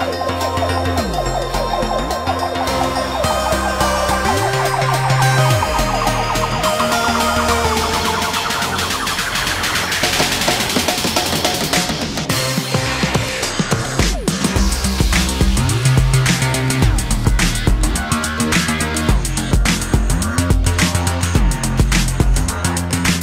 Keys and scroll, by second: 1.4 m, 7.2 space, 10.5 m, 15.7 space.